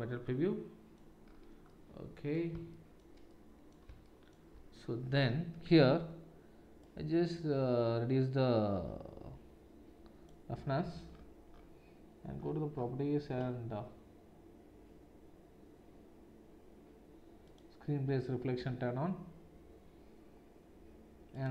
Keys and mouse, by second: 6.8-17.9 drag, 17.9-21.5 middle drag.